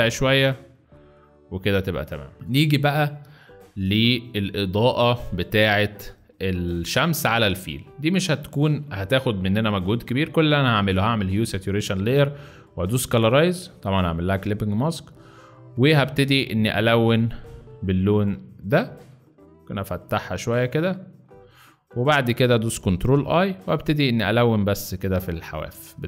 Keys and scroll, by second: 2.3 space, 2.4 z, 3.7 space, 18.3 space, 22.9 ctrl+i, 24.0 x.